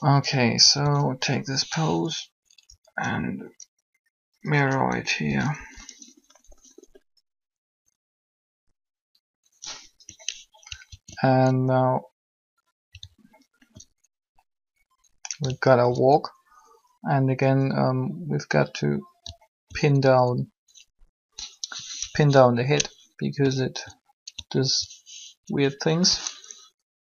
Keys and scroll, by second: 0.4 a, 0.7 a, 2.6 Up, 5.2 Down, 10.9 alt+a, 21.8 3.